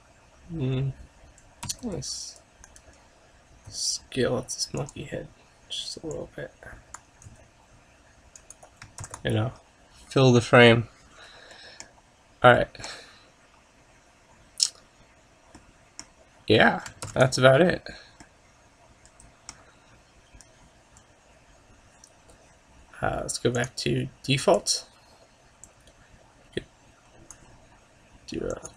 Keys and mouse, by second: 1.9 s, 3.8 s, 7.3 s, 9.1 ctrl+s, 24.7 click, 25.7-27.5 drag, 28.6 click.